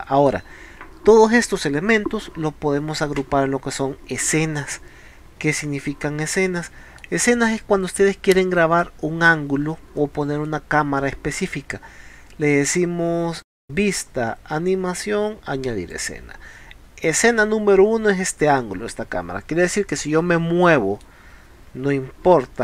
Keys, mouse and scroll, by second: 5.2 scroll down 2, 5.7 scroll up 2, 6.3 scroll up 2, 6.7-7.0 middle drag, 7.6 scroll down 2, 7.9 scroll up 2, 8.3 scroll down 2, 8.6 scroll up 2, 9.4 middle drag, 13.4 click, 15.9 click, 19.9 middle click, 21.3 scroll down 2.